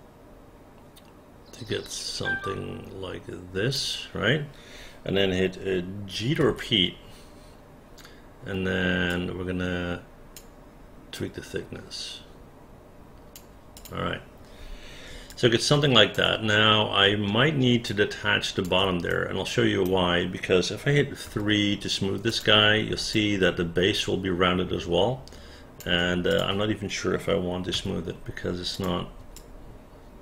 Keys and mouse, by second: 6.4 g, 9.1-10.3 drag, 11.1-13.3 drag, 13.7 click, 15.3 alt+click, 17.3 alt+middle click, 17.9 alt+click, 19.1 right click, 21.3 3, 22.3 click, 23.1-25.8 alt+drag, 26.3 click, 27.7 1, 28.7 click, 29.3-30.2 alt+drag.